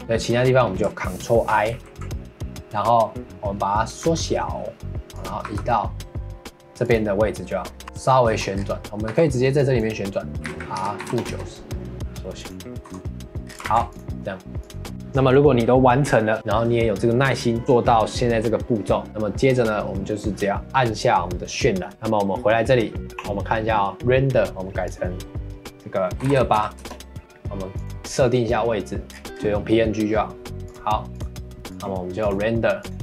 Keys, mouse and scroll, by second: 1.7 ctrl+i, 4.0 s, 5.4 g, 7.8 middle click, 8.2 Tab, 8.5 scroll up 3, 8.8 middle click, 9.1 3, 9.6 click, 10.3 r, 11.9 s, 12.8 Tab, 13.4 scroll down 4, 13.6 ctrl+s, 14.6 click, 14.9-16.4 scroll up 2, 21.9 click, 24.8-27.2 drag, 27.2-27.8 scroll down 3, 27.8-29.3 drag, 29.3-31.1 scroll down 3, 31.1-33.0 drag.